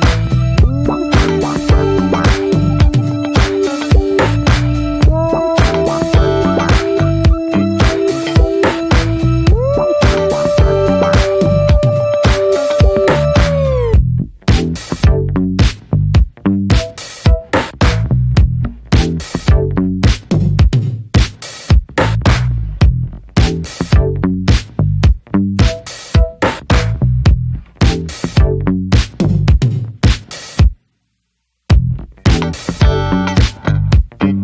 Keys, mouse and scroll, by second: 0.0 Tab, 2.7-3.0 drag, 3.0-4.1 middle drag, 4.1 ctrl+s, 4.3-4.7 shift+middle drag, 4.7 click, 5.5 /, 5.8 middle click, 6.1 Tab, 6.4-7.2 shift+middle drag, 7.2-7.5 drag, 7.5 middle click, 8.4 scroll up 1, 8.5-9.0 drag, 9.0 middle click, 9.3 3, 9.4-9.7 drag, 9.8-10.4 middle drag, 10.4-11.4 drag, 11.4 x, 12.0-12.6 drag, 12.6 ctrl+a, 13.3-13.8 middle drag, 13.8 drag, 14.1-15.4 middle drag, 15.4 3, 15.5-16.9 drag, 16.9 2, 17.4-17.8 alt+shift+drag, 17.8-18.3 shift+middle drag, 18.3 scroll up 1, 18.5-19.1 middle drag, 19.1 alt+shift+drag, 19.4-20.8 middle drag, 20.8-21.2 alt+shift+drag, 21.2-21.9 middle drag, 21.9 scroll up 1, 22.1-22.5 shift+middle drag, 22.5-23.2 scroll up 1, 23.2-24.3 alt+shift+drag, 24.3 scroll down 2, 24.5-25.3 shift+middle drag, 25.3 alt+shift+drag, 25.5-26.4 right drag, 26.4 a, 27.0 right click, 27.7 scroll down 2, 27.9-28.7 shift+middle drag, 28.7 Tab, 29.0-29.5 shift+middle drag, 29.5 ctrl+s, 29.7 drag, 29.9 Tab, 30.2-30.8 scroll up 1, 30.8-32.1 drag, 32.1-33.3 right drag, 33.3 a, 33.8 right click.